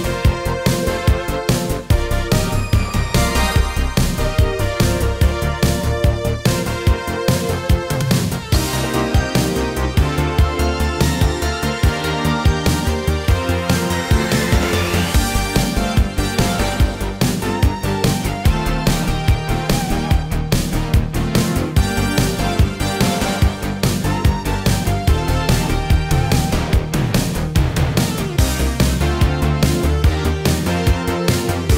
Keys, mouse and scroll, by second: 10.3 ctrl+space, 10.8-12.0 typing, 14.3 click, 16.7 ctrl+c, 17.5 click, 21.8 ctrl+v, 22.4 click, 28.5 ctrl+v, 29.8 click.